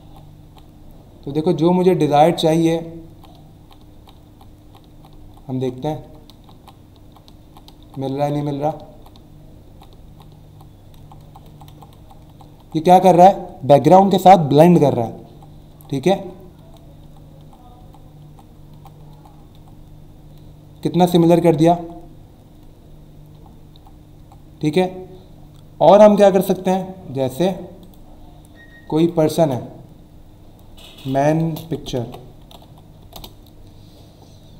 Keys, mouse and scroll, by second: 21.7 Up, 27.8 click, 28.9 click, 29.3 ctrl+a, 30.8-33.0 typing, 33.1 Return.